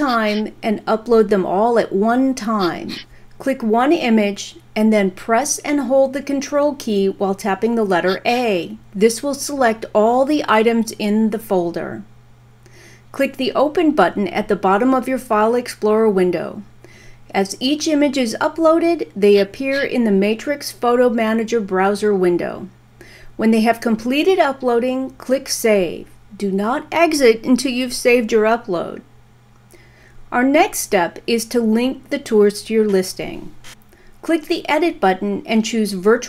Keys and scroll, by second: 5.0 ctrl+a.